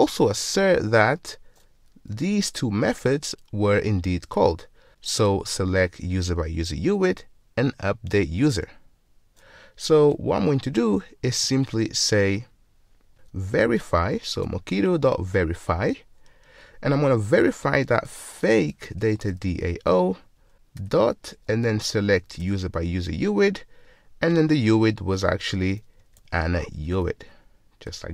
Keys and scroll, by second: 2.4 ctrl+Tab, 10.1 ctrl+Tab, 14.5 Return, 19.1 Return, 22.5 Return, 26.8 Return.